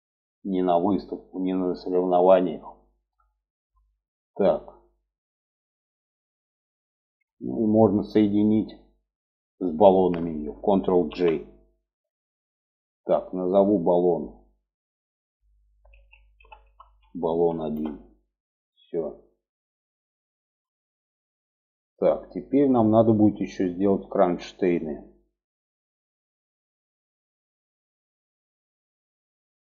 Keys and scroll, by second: 10.4 ctrl+j.